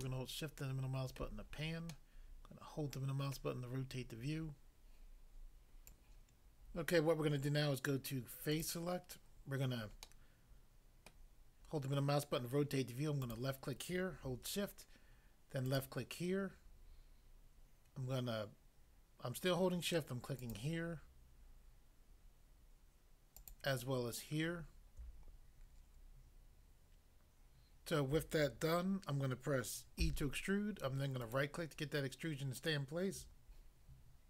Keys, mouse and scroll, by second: 0.0 shift+middle click, 3.4 middle click, 5.9 click, 8.5 click, 8.7 click, 10.1 middle click, 11.1 middle click, 13.3 click, 15.7 shift+click, 20.5 shift+click, 23.4 shift+click, 30.0 e, 31.3 right click.